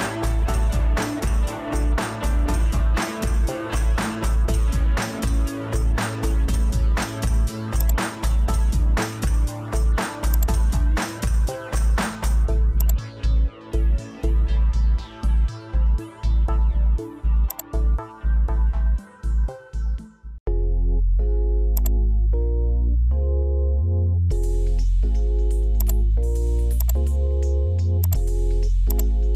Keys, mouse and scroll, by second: 1.7 Escape, 6.7 Escape, 8.9 alt+e, 16.2 Escape, 17.0 alt+n, 27.4 Escape, 28.2 Escape.